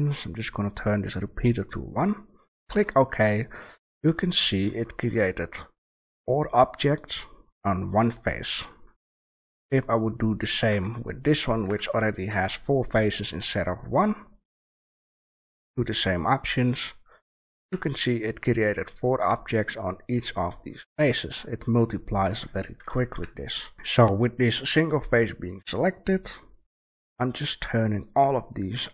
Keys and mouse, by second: 3.5 click, 3.6-4.3 middle drag, 5.4-8.8 middle drag, 8.9 middle click, 9.4 a, 9.7-10.6 right drag, 10.6 Tab, 11.6 Tab, 12.2 shift+a, 17.5 a, 20.5-23.1 middle drag, 23.1 Delete, 23.7 shift+a.